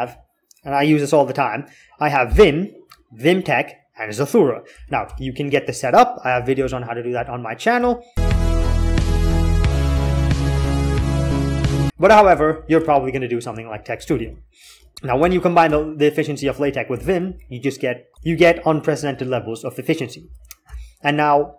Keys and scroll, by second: 4.9 alt+k, 6.2 j, 7.6 k, 7.8 k, 11.9 alt+x, 12.0 alt+x, 12.0 alt+x, 12.6 alt+x, 13.9 alt+x, 14.0 alt+x, 15.0 alt+k, 15.4-17.0 typing, 18.1 alt+x, 20.1 j, 20.4 k.